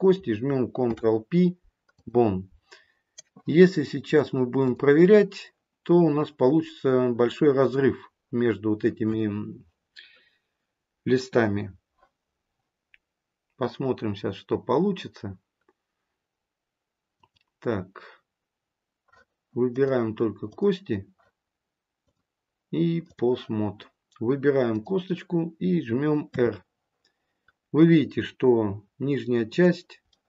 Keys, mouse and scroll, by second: 0.7 ctrl+p, 4.0 click, 17.0 click, 19.7 click, 26.2 r, 30.0 middle click.